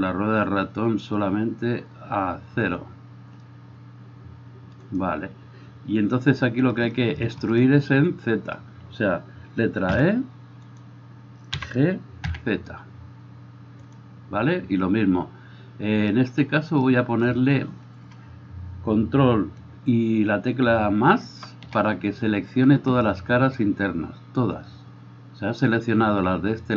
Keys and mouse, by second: 5.1-26.7 middle drag, 10.2 e, 11.7 g, 21.3 ctrl+KP_Add.